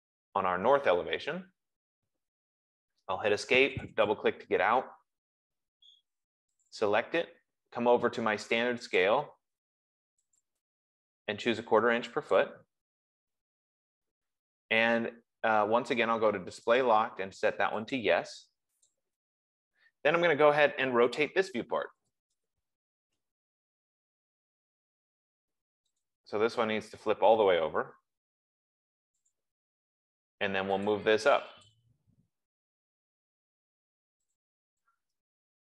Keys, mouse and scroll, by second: 0.6 scroll, 1.3 scroll, 2.7 Escape, 4.3 click, 4.5 click, 6.9 click, 9.3 click, 10.7 click, 12.7 click, 17.2 click, 18.3 click, 19.3 click, 21.9-23.2 typing, 26.4 click, 29.7 click, 31.4 click, 32.0 click, 33.0 typing, 34.7 click.